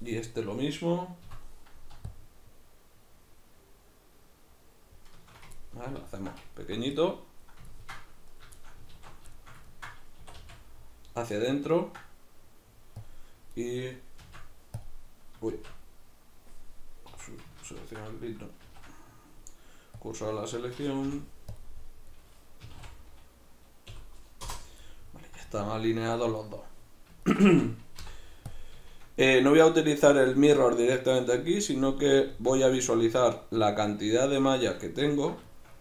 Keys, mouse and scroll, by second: 8.3 right drag, 8.6-13.1 shift+middle drag, 8.9 alt+q, 10.2 e, 13.1 click, 13.5 right click, 14.2 shift+s, 17.2 Escape, 17.7 ctrl+z, 18.7 shift+s, 21.1 ., 22.1 right drag, 22.7 s, 24.9-35.8 middle drag, 28.0 ., 32.7 z.